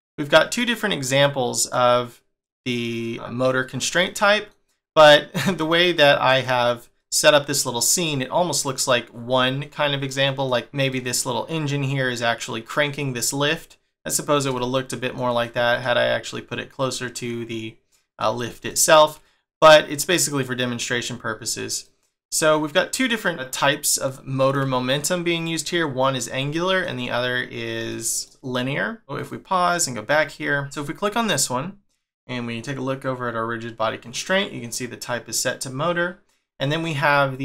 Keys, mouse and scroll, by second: 1.2 middle click, 3.4 scroll down 1, 4.1 middle click, 5.5 click, 6.3 click, 7.0 middle click, 8.0 middle click, 10.0 middle click, 10.9 middle click, 14.5 shift+middle click, 16.9 middle click, 18.7 shift+middle click, 20.3 click, 21.8 middle click, 24.1 shift+middle click, 24.8 scroll down 1, 26.5-27.1 scroll down 3, 26.6 middle click, 27.7 scroll down 2, 28.0 shift+middle click, 28.3 click, 28.6 middle click, 29.2 click, 29.6 click, 30.2-30.7 scroll up 9, 30.8 shift+middle click, 31.3 click.